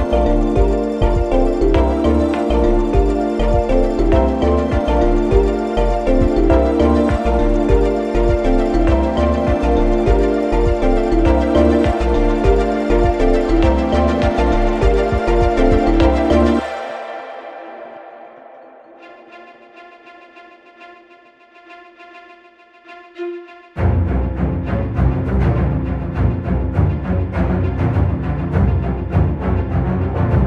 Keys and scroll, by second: 2.0 Escape, 17.9 4, 20.4 3, 22.1 ], 25.5 ctrl+z, 25.8 ., 28.2 ], 28.9 ], 30.1 ctrl+z.